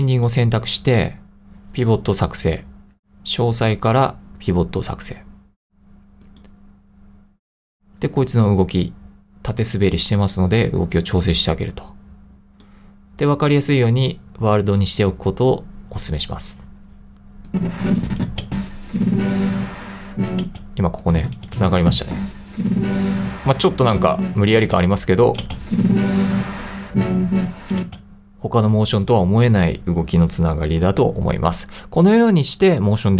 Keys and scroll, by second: 18.5 space, 20.5 space, 24.8 space, 27.8 space.